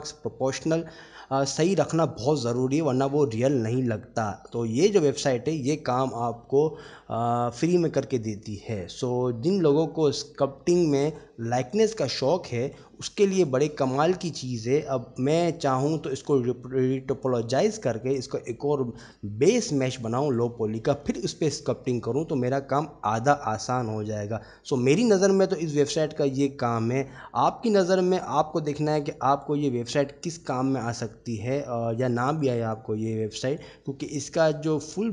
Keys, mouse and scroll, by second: 4.5 middle click, 5.1 click, 9.3-10.0 middle drag, 11.2 click, 12.5-12.9 middle drag, 13.7 click, 20.3-20.6 middle drag.